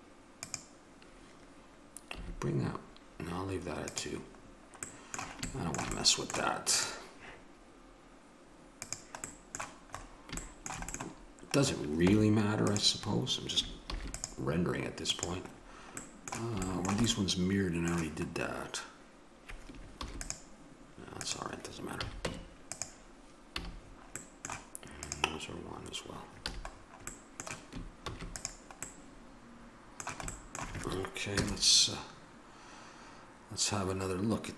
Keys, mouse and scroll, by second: 2.1 a, 4.5 middle click, 6.7-8.8 right drag, 8.8-10.5 drag, 12.0 Tab, 13.8 ctrl+r, 20.0 ctrl+r, 21.9 a, 22.2 Tab, 23.5 a, 25.0-26.1 drag, 26.4 a, 28.0 ctrl+s, 31.3 KP_0.